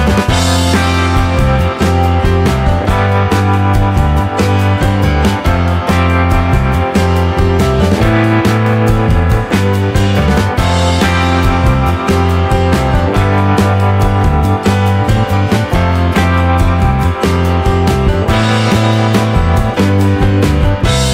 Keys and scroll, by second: 2.3 Escape, 6.8-11.9 typing, 12.2 Escape, 16.5 BackSpace, 17.1 shift+u.